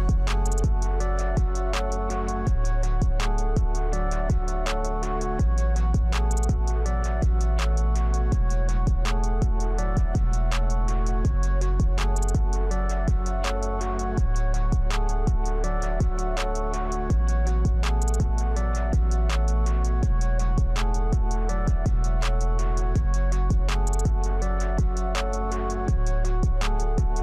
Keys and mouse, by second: 1.1-5.5 drag, 7.1 middle click, 9.9-11.0 drag, 12.3 Tab, 13.3 click, 15.6 click, 15.9 click, 16.5-18.0 middle drag, 19.4 shift+middle click, 23.2 click, 24.3 alt+shift+click, 25.5 click, 26.3 click.